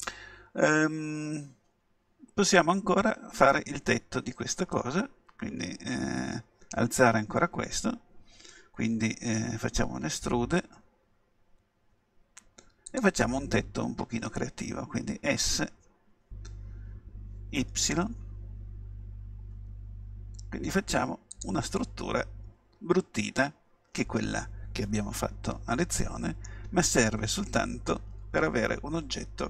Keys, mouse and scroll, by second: 9.9 e, 13.1-14.8 drag, 15.5 s, 21.4-23.4 drag, 21.8-23.3 middle drag, 23.4 middle click, 27.0-29.4 middle drag.